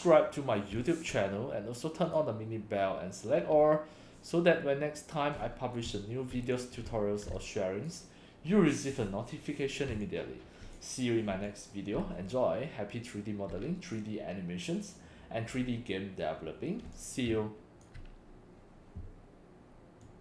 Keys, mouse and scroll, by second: 0.8 click, 2.1 click, 5.4 scroll up 2, 5.9 x, 5.9-6.6 drag, 6.9-7.9 drag, 6.9 x, 7.3 c, 9.9 c, 10.0-10.8 drag, 11.3 x, 11.5-14.0 drag, 12.0 c, 15.6 scroll down 2, 16.9 x, 17.0 click, 17.3 c, 20.1 click.